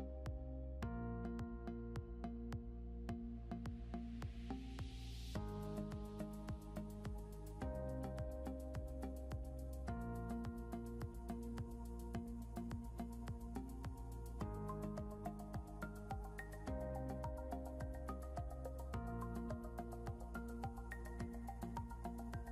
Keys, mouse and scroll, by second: 2.6 scroll down 1, 5.0 double click, 11.7 scroll up 1, 12.7 scroll up 1, 14.6 ctrl+z, 14.8 scroll down 1, 16.8 ctrl+z, 17.5 ctrl+z, 18.5 ctrl+z, 18.9 ctrl+z, 21.8 scroll up 1.